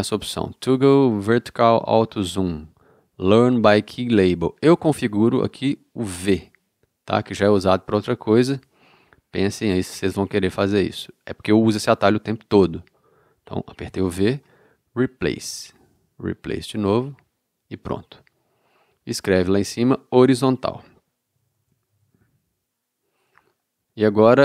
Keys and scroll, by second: 13.9 v, 21.0-21.9 typing.